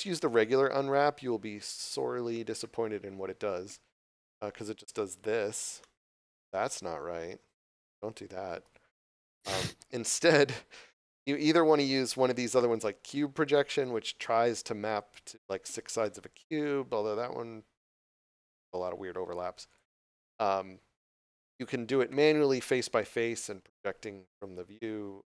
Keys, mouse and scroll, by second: 0.1 click, 6.6 scroll up 1, 7.0 scroll down 1, 7.6 shift+middle click, 8.6 ctrl+z, 9.7 click, 14.9 click, 18.6 ctrl+z, 19.6 click.